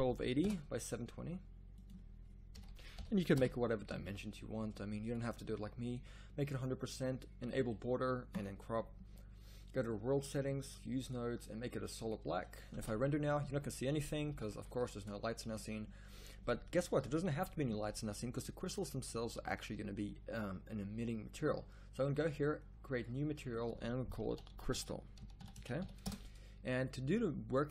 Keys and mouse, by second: 3.6-4.7 middle drag, 12.9 shift+z, 14.3 z, 14.5 z, 20.5-22.1 drag, 26.9 click.